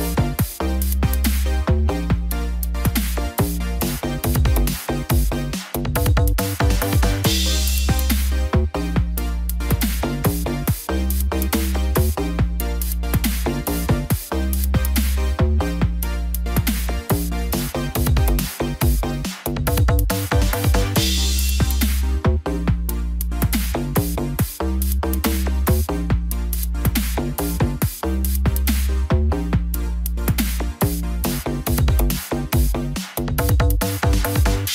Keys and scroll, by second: 7.7 ctrl+t, 23.0 ctrl+t.